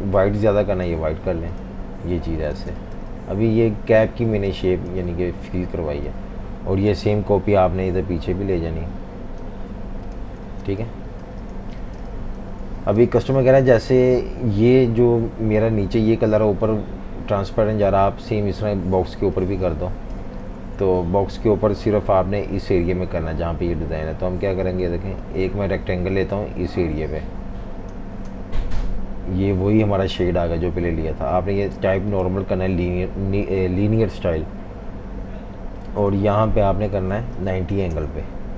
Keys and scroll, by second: 2.6 v, 2.7 space, 4.3 v, 4.4 space, 10.4-12.9 typing, 19.1 typing, 20.5 typing, 22.1 m, 28.7 v, 37.2-38.2 typing.